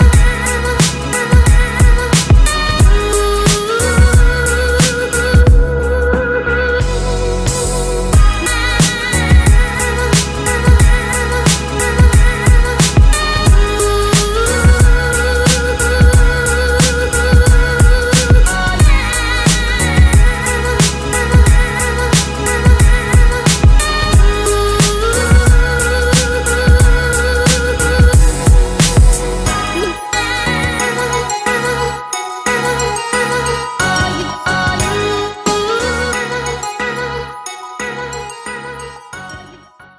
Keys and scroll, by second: 1.6 ctrl+c, 1.7 ctrl+b, 3.5 ctrl+c, 3.6 ctrl+b, 13.7 ctrl+c, 16.1 ctrl+g, 19.4 ctrl+shift+[.